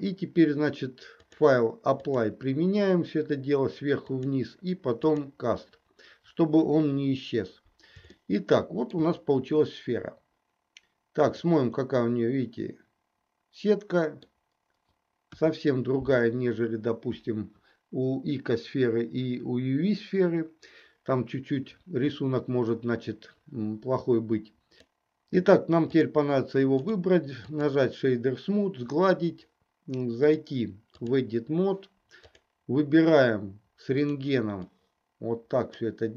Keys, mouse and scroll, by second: 1.2-2.2 drag, 4.2-5.2 drag, 6.8 KP_1, 8.3 shift+middle click, 11.4 click, 12.0-14.3 middle drag, 15.3 KP_1, 26.7 right click, 30.4 click, 32.2 click, 34.1 click, 34.8-35.9 drag.